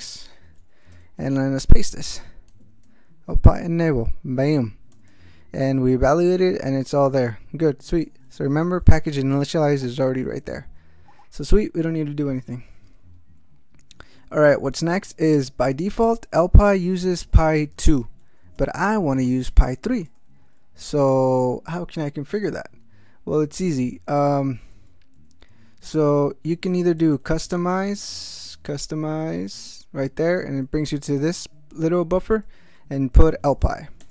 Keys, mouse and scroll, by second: 0.9 Return, 1.6 ctrl+y, 2.5 ctrl+x, 3.1 ctrl+e, 4.9 ctrl+x, 5.1 ctrl+s, 8.6-10.7 typing, 8.9 ctrl+alt+shift+n, 10.8 ctrl+n, 16.0 Return, 16.5-20.0 typing, 23.6 Return, 24.7 Return, 26.7 alt+x, 27.0 alt+c, 27.1 alt+u, 27.2 alt+s, 27.3 alt+t, 28.0-28.9 typing, 29.6 Return, 32.2 ctrl+n, 33.0-34.0 typing.